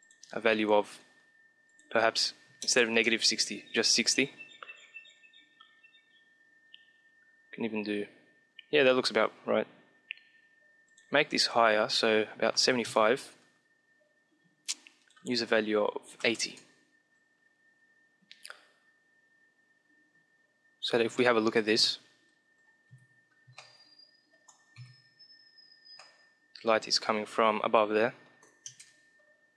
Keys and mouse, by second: 10.8-12.3 drag, 14.9-16.5 drag, 21.2-26.4 middle drag, 22.8 KP_5, 24.7 KP_5, 27.3 middle click, 28.6 KP_0, 28.9 middle click.